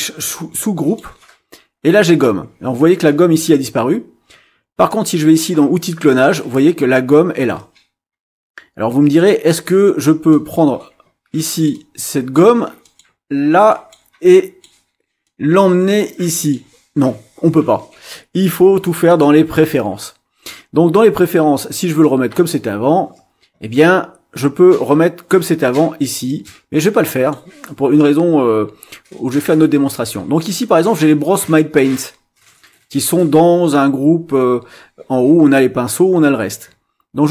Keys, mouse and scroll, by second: 4.9-9.3 drag, 10.3-12.5 drag, 12.8 click, 13.7 click, 14.3 click, 15.2-16.7 drag, 19.1 click, 22.0-27.5 drag, 32.5 click, 34.3 scroll up 1.